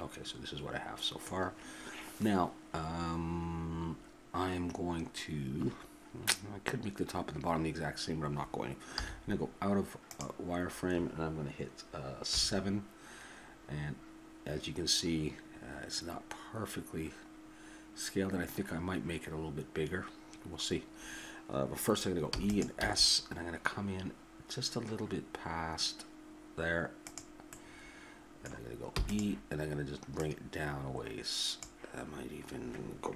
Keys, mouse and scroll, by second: 9.0 z, 12.3 KP_7, 17.8-20.2 middle drag, 22.2 e, 22.8 s, 27.5-30.2 middle drag, 28.9 e, 30.2-32.0 drag.